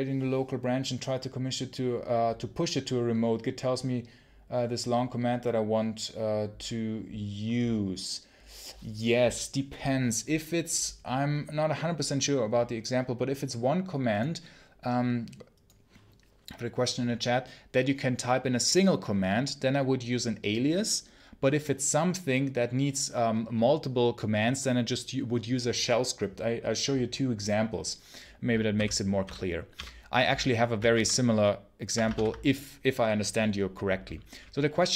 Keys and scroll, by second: 28.6 ctrl+super+h, 29.1 ctrl+super+h, 29.6 ctrl+super+l, 30.8 super+q, 32.0 ctrl+l.